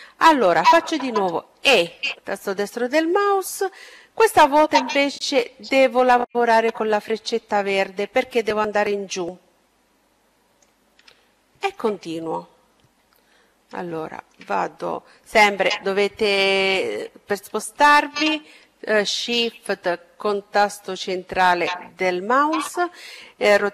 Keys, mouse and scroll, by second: 0.3 e, 6.8-8.6 drag, 9.8-11.5 middle drag, 12.6-14.7 middle drag, 15.3-16.2 scroll up 1, 18.9-20.8 middle drag.